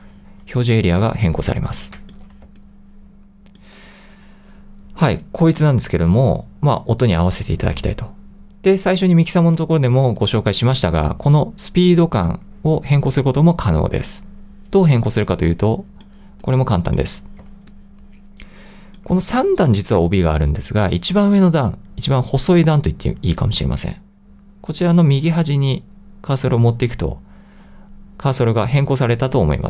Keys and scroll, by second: 2.5 |, 10.0 l, 13.1 2, 17.5 l.